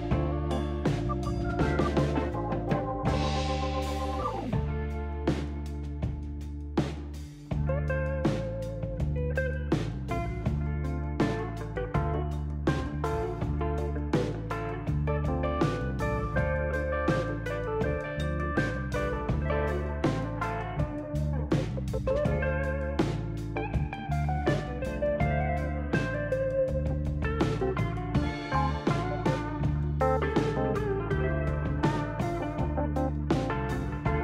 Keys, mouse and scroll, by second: 0.6 shift+s, 2.4 shift+s, 3.8 shift+s, 5.3 shift+s, 6.9 shift+s, 16.9 click, 19.2 shift+s, 21.5 shift+s, 23.0 shift+s, 24.9 shift+s, 26.0 ctrl+z.